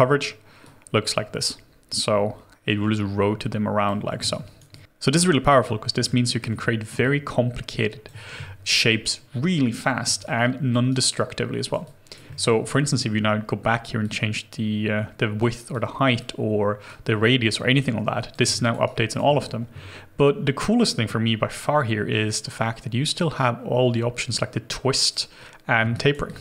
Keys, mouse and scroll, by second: 4.7 alt+click, 6.1 alt+middle click, 7.0 alt+click, 10.2 alt+click, 10.9 alt+right click, 11.9 alt+click, 12.3 alt+middle click, 13.0 scroll up 1, 18.6 alt+click, 18.9 alt+right click, 20.2-22.7 scroll down 1, 25.9 alt+right click, 26.3 alt+click.